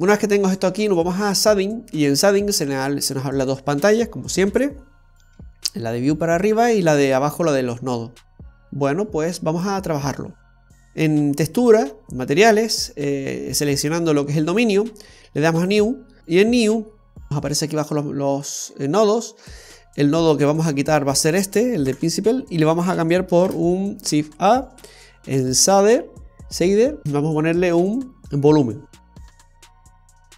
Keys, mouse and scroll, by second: 0.7-1.2 scroll down 2, 9.1 click, 11.8 click, 15.7 click, 17.7 click, 18.1 click, 18.3 click, 19.7 click, 21.5 click, 22.3 Delete, 23.7 shift+a.